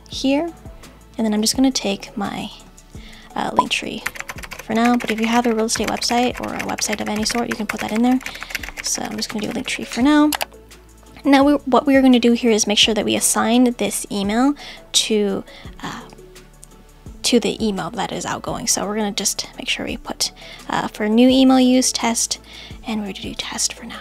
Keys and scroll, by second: 2.8 super+c, 8.5 super+v.